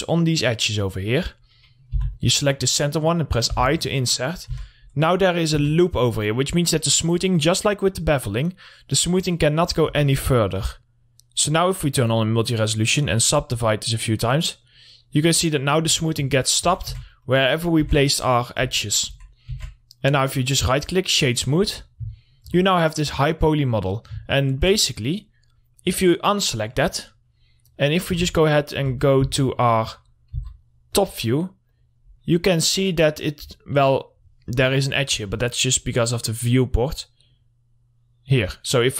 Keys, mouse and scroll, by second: 0.0 ctrl+r, 0.3 click, 1.8 scroll down 1, 2.1 middle click, 2.4 3, 2.5 click, 3.1 scroll down 1, 3.3 middle click, 4.0 i, 4.7 click, 5.0 Tab, 5.2-6.1 scroll up 1, 6.1 Tab, 10.4 Tab, 11.1 click, 15.8-16.1 scroll down 1, 16.1 middle click, 16.3 scroll up 1, 16.5 scroll down 1, 16.9 alt+middle click, 17.3-17.9 scroll up 1, 17.9 middle click, 18.3 Tab, 19.6 Tab, 20.6 right click, 21.4 click, 21.8 middle click, 22.1-22.4 scroll down 1, 22.6 alt+middle click, 23.4 click, 24.7-26.2 alt+middle drag, 26.2 click, 28.6 1, 29.7 Tab, 30.8 `, 31.4 click, 32.5-32.8 scroll down 1, 32.8 middle click, 33.2-33.8 scroll down 1, 33.8-34.7 scroll up 1, 35.3 middle click, 36.1 click.